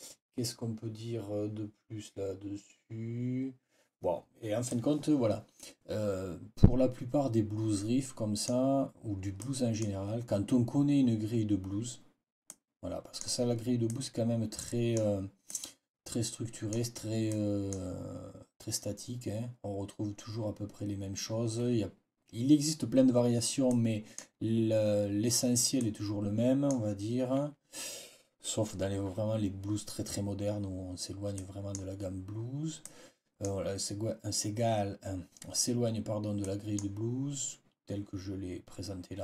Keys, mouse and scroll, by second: 4.6-6.9 drag, 6.9-8.5 scroll up 1, 9.3-9.9 scroll up 1, 12.4-12.7 scroll up 2, 12.5 click, 12.7 click, 13.1 scroll down 1, 13.8-15.0 scroll down 1, 15.4 scroll down 1, 15.6-16.8 drag, 17.2 click, 23.6 click, 25.7-26.8 drag, 31.3 click, 32.7 click, 36.3 click.